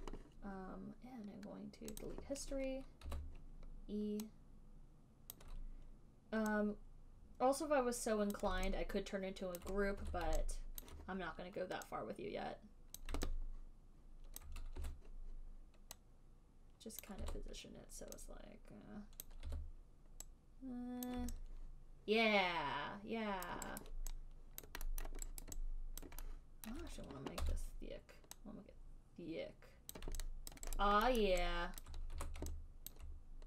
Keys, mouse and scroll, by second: 0.1 click, 2.4 click, 3.0 click, 3.4 e, 5.7 click, 8.6 click, 9.9 alt+click, 10.3 w, 11.1 alt+click, 13.2 click, 14.7 alt+click, 15.1 e, 17.4 click, 17.5 w, 19.5 click, 19.8 e, 21.4 click, 23.7 alt+click, 24.1 alt+click, 25.0 alt+click, 25.0 alt+right click, 25.4 alt+middle click, 25.7 alt+click, 26.4 alt+click, 27.0 alt+middle click, 27.8 r, 28.5 alt+right click, 30.3 click, 30.8 alt+right click, 31.1 alt+right click, 31.6 alt+middle click, 32.1 alt+click, 32.5 w, 33.3 alt+click.